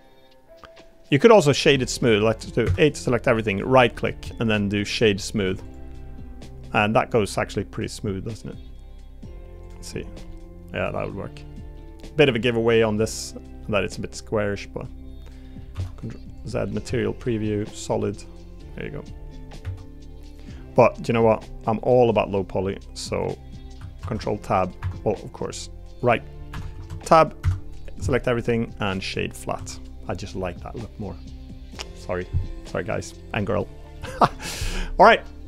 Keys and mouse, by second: 1.4 click, 1.5 click, 2.0 Tab, 2.6 a, 5.4 Tab, 5.6 click, 5.9-7.3 middle drag, 10.3-11.3 middle drag, 11.7 middle click, 12.3 middle click, 13.0 middle drag, 13.6-14.9 middle drag, 15.4 middle drag, 15.7 z, 16.8 z, 18.0-18.7 middle drag, 21.1 middle drag, 21.7 middle drag, 24.0 ctrl+Tab, 26.1-26.5 right drag, 26.7 Tab, 27.4 a, 27.8-29.1 right drag, 29.5 Tab, 29.7 click, 30.3-31.8 middle drag, 32.4 middle click, 33.0 middle click, 33.9-34.3 middle drag.